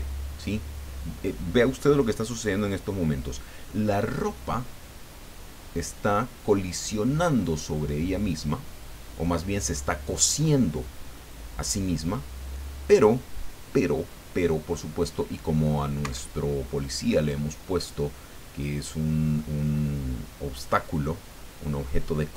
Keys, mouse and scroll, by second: 16.0 Escape, 17.2-19.5 middle drag.